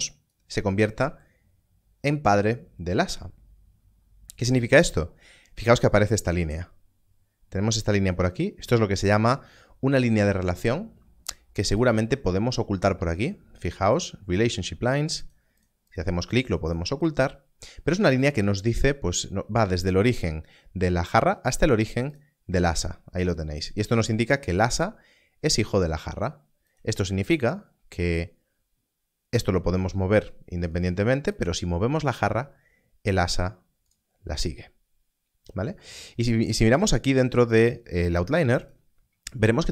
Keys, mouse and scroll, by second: 4.4 click, 5.2-5.5 scroll up 1, 11.8 click, 15.2 click, 23.6 click, 25.6 scroll down 1, 27.1 g, 30.7 right click, 31.3 click, 31.9 g, 38.6 g.